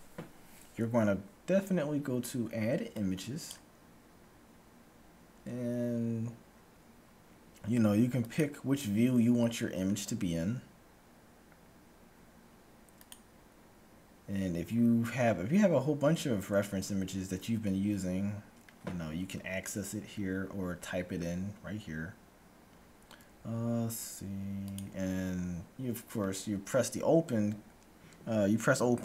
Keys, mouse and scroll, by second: 2.9-4.7 drag, 8.2-10.1 drag, 13.1-14.9 drag.